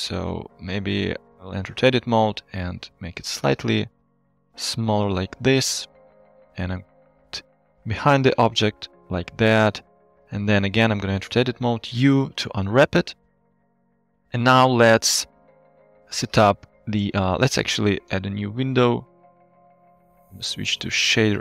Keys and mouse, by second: 0.8 Tab, 2.3 s, 4.5 click, 5.0 middle click, 5.5 Tab, 6.2 g, 6.5 y, 7.3 click, 7.6-9.8 middle drag, 10.0 Tab, 11.9 u, 13.2 middle click, 13.8 Tab, 14.2-14.7 middle drag, 15.8 KP_1, 16.6 middle click, 18.3 click, 19.1 right click, 19.2 click, 20.0-21.1 drag.